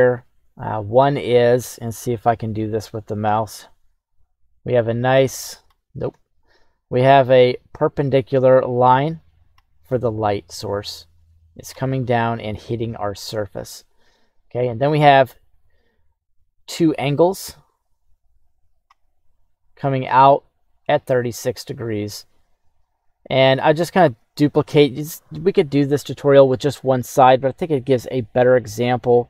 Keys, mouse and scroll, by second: 3.7-5.7 drag, 6.0 ctrl+z, 7.2-9.5 drag, 11.0 click, 12.0 middle click, 14.3 KP_1, 15.9-18.8 drag, 19.9-24.1 drag, 29.1 click.